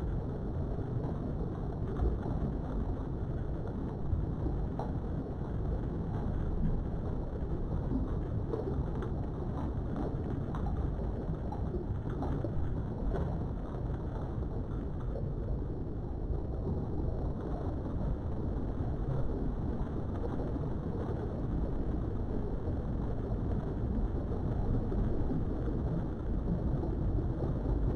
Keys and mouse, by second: 1.2 Tab, 1.8-2.9 middle drag, 3.4 KP_3, 4.4 Tab, 4.8 middle click, 5.9 KP_7, 7.0 shift+middle click, 8.4 ctrl+r, 18.7 click, 19.3 Tab, 19.6 middle click, 21.9 click, 23.1 Tab, 24.8 3, 25.4 click, 25.7 shift+middle click, 26.7 shift+click.